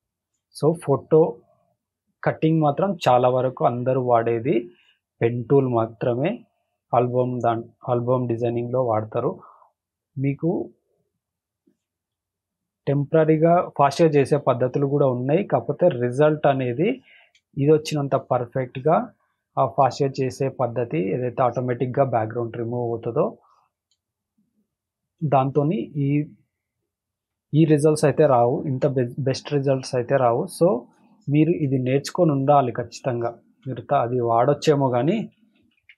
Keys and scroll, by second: 0.6 space, 2.2 space, 2.8 space, 4.6 space, 5.1 space, 6.8 space, 7.4 space, 9.2 space, 9.7 space, 11.5 space, 12.0 space, 13.8 space, 15.5 space, 17.2 space, 19.0 space, 21.3 space, 21.8 space, 23.7 space, 25.7 space, 27.9 space, 28.4 space, 30.9 space, 31.4 space, 33.0 space, 33.5 space, 35.5 ctrl+-.